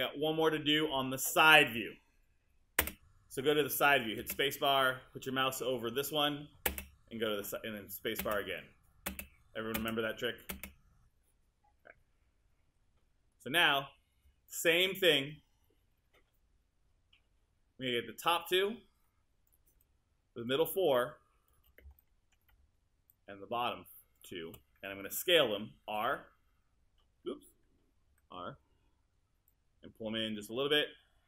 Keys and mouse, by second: 2.8 space, 6.7 space, 14.5 alt+click, 25.9 t, 28.1 r.